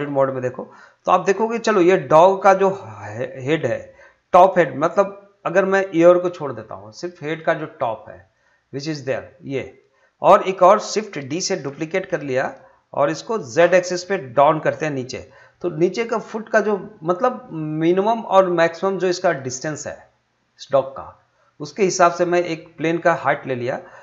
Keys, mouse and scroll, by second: 0.3-0.7 scroll up 1, 0.7-3.7 middle drag, 3.7-10.6 drag, 11.5 shift+d, 13.6 z, 20.7 click, 21.1-22.1 scroll down 1, 22.1-24.0 middle drag.